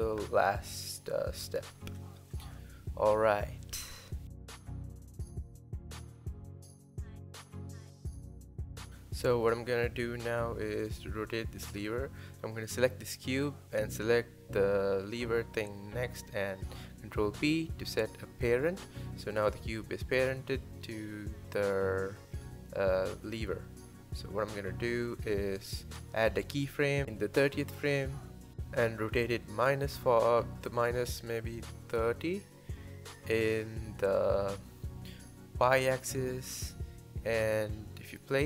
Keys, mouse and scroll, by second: 4.8-5.6 drag, 7.0-8.9 drag, 8.9 space, 10.4 r, 11.2 click, 11.7-14.2 scroll up 2, 14.2 shift+click, 14.6 scroll down 1, 14.8-16.6 scroll up 1, 16.6 ctrl+p, 16.9 click, 17.3 g, 19.2 shift+middle click, 19.4 g, 20.7-22.4 drag, 23.1 i, 24.6 i, 25.2-27.5 drag, 27.5 r, 29.5 r, 31.6 r, 35.1 click, 35.7 space, 37.2 space, 37.6 scroll down 4, 38.1-38.4 scroll up 1.